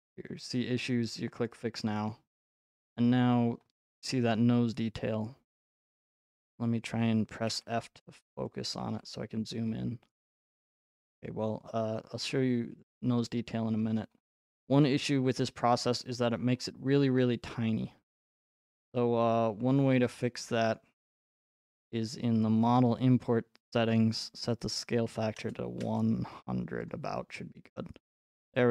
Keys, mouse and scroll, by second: 1.5 click, 3.0-4.5 scroll, 5.6 click, 7.5 f, 8.8-9.8 scroll, 8.9 f, 9.9 click, 12.8-13.8 scroll, 13.8-15.8 scroll, 15.8-17.8 scroll, 18.7-19.1 scroll, 19.4 middle click, 19.6 middle click, 19.9 middle click, 20.5 scroll, 20.8 click, 22.8 click, 24.6 click, 25.1 typing, 26.9 click, 28.0-28.7 scroll.